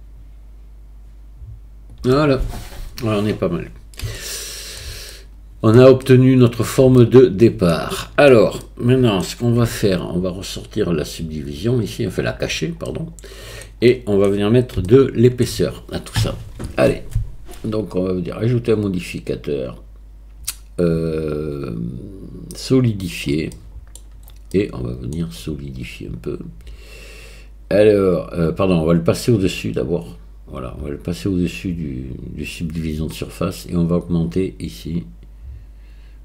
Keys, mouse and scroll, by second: 4.2 shift+middle click, 5.1 middle click, 6.1 shift+middle click, 7.0-8.3 middle drag, 8.7 middle click, 9.7 Tab, 11.9 click, 12.9-13.6 middle drag, 13.9 middle click, 14.9-15.4 shift+middle drag, 18.4-23.6 drag, 23.6-23.9 middle drag, 24.5-25.1 middle drag, 29.3-36.2 drag.